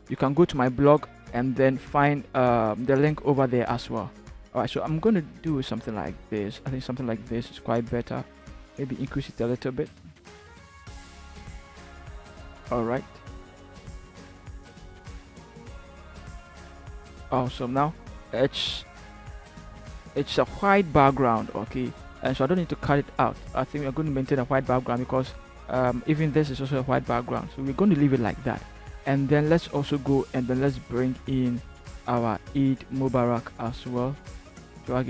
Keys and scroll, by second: 13.4 shift+Down, 14.0 shift+Return, 20.0 ctrl+-, 20.9 ctrl+h.